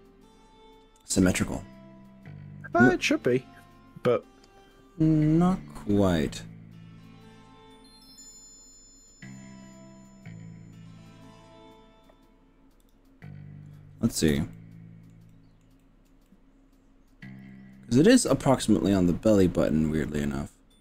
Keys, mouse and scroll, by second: 12.8 click, 14.6 shift+middle click, 15.3 shift+middle click, 15.8 shift+middle click, 16.3-20.8 shift+middle drag.